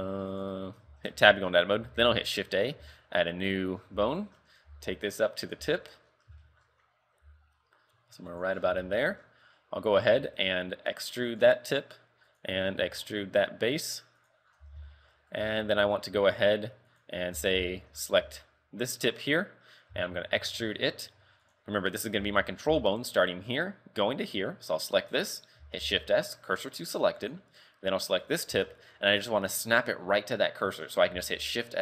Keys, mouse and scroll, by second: 0.4 right click, 1.2 Tab, 1.5-1.9 scroll up 5, 2.0 shift+a, 2.9 a, 3.4 right click, 3.8 scroll down 5, 4.1 shift+middle click, 4.7 g, 5.8 shift+middle click, 6.1 scroll up 6, 6.5 shift+middle click, 7.0 scroll up 1, 7.2 g, 8.6-10.2 scroll down 7, 8.9 shift+middle click, 10.2 e, 12.4 right click, 12.8 e, 14.6 scroll down 2, 14.7 z, 15.0 shift+middle click, 15.3 scroll up 3, 15.4 z, 15.7 a, 16.2 a, 17.0 right click, 17.4 z, 17.7 shift+middle click, 18.2 z, 18.5-18.9 scroll down 3, 19.2-19.5 scroll up 7, 20.4 e, 22.2 z, 22.8 z, 24.7 right click, 25.8 shift+s, 28.2 right click, 28.5 scroll down 1, 28.8 shift+middle click, 31.4 shift+s.